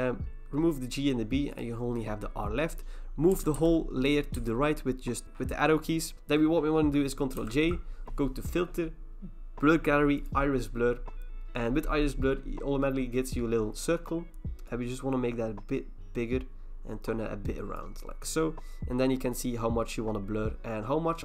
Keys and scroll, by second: 3.3 Right, 3.6 Right, 4.4 Right, 6.1 ctrl+e, 7.4 ctrl+j.